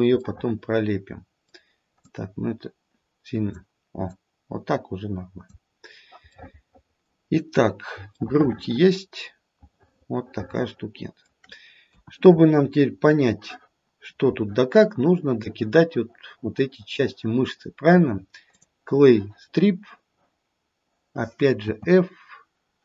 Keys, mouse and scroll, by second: 0.2 middle click, 0.8 middle click, 1.7 middle click, 2.0 click, 4.1 click, 5.9-6.4 scroll down 2, 6.4 middle click, 8.1 middle click, 8.1-8.9 scroll down 2, 9.3 middle click, 9.9 middle click, 10.5 middle click, 11.0 middle click, 11.8 KP_1, 12.4-13.4 scroll up 6, 14.2-14.9 scroll up 1, 18.7 click, 21.6 f.